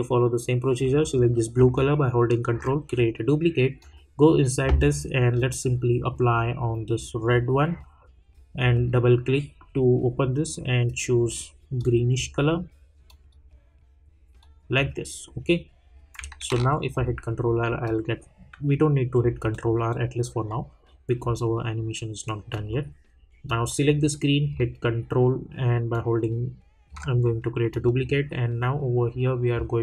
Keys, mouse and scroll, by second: 1.7-15.2 ctrl+drag, 16.5 ctrl+r, 17.8 click, 22.5 click, 25.9-27.7 ctrl+drag.